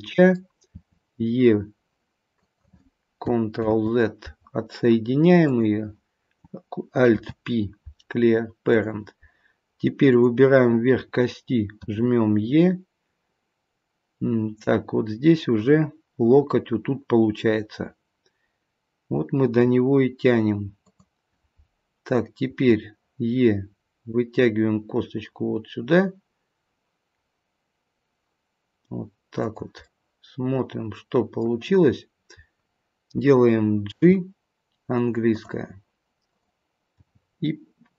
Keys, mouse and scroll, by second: 0.7 e, 3.5 ctrl+z, 5.4 click, 7.1 alt+p, 10.0 click, 11.8 e, 22.5 e, 29.8 middle click, 32.0-32.9 scroll down 2, 33.9 g, 36.2 click, 37.0 g.